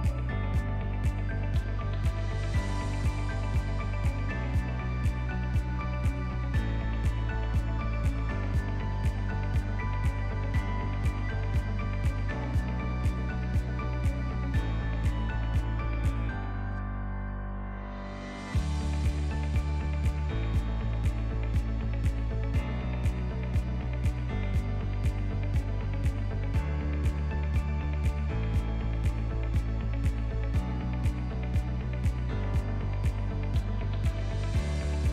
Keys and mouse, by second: 2.6 drag, 3.6 click, 6.0 click, 7.5 click, 10.1-12.7 drag, 13.2 click, 14.2 click, 15.1 click, 18.1-20.1 drag, 19.4 BackSpace, 21.0 click, 22.8-24.0 drag, 26.7 r, 30.5 ctrl+middle click, 30.9-31.4 shift+middle drag, 32.2 alt+h, 32.9 click, 34.5 click.